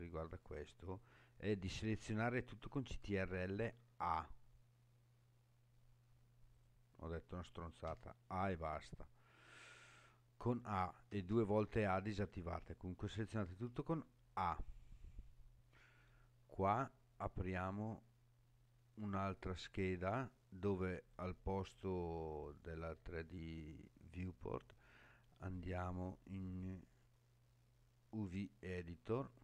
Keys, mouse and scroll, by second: 3.7 ctrl+a, 6.5 click, 7.9 a, 11.1 a, 11.3 a, 13.9 a, 17.6-20.2 drag, 21.1-28.5 drag.